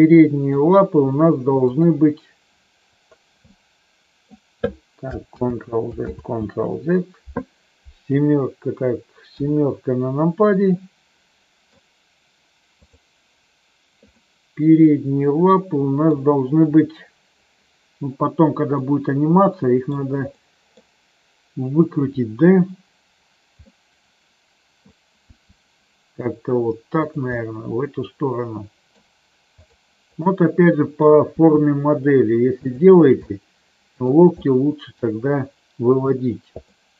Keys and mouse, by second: 1.5 click, 3.4 middle click, 5.3 ctrl+z, 6.0 ctrl+z, 8.0 KP_4, 10.7-11.7 middle drag, 12.8 click, 14.2-16.0 middle drag, 18.8-19.9 middle drag, 20.2 middle click, 23.5-24.8 middle drag, 25.3 r, 27.3-28.8 middle drag, 30.2 middle click, 31.2 r, 33.2 middle click, 34.3 middle click, 36.7-36.9 middle drag.